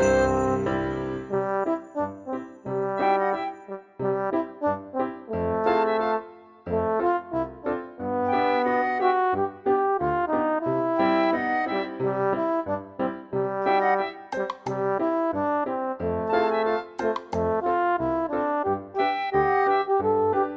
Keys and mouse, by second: 0.5 middle click, 2.7 s, 2.9 x, 3.7 right click, 5.5 click, 6.0 s, 6.4 x, 9.4 click, 9.7 Tab, 10.0 ctrl+z, 10.7 s, 11.1 y, 12.2 click, 12.5 F6, 15.5 click, 16.9 middle click, 18.3 shift+click, 19.5 ctrl+x, 20.1 middle click.